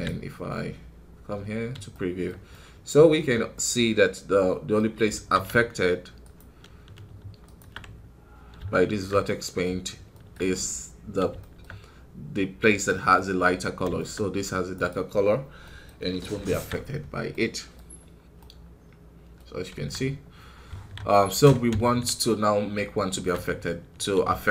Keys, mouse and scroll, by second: 0.9-1.4 scroll up 4, 1.8-4.7 shift+middle drag, 4.7 scroll up 1, 5.0 alt+a, 6.1 ctrl+shift+click, 7.4 ctrl+shift+click, 9.1-10.6 middle drag, 10.6-11.3 scroll down 1, 11.3-14.6 shift+middle drag, 14.6 right click, 15.0 scroll up 3, 15.5 middle click, 16.4 alt+a, 17.2 middle click, 17.7-18.3 scroll up 2, 18.3-19.4 middle drag, 19.4-21.0 scroll down 7, 19.6 KP_1, 21.0-24.5 middle drag.